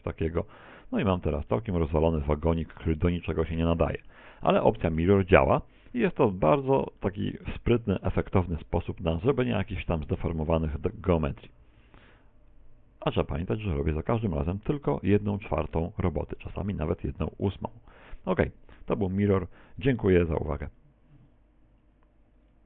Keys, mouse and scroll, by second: 0.5 ctrl+click, 0.9 middle click, 1.5 middle click, 3.5 middle click, 4.4 scroll down 2, 4.7 shift+middle click, 5.1 shift+middle click, 7.0 middle click, 7.7 middle click, 8.3 middle click, 10.8 middle click, 11.8 middle click, 18.7 right click.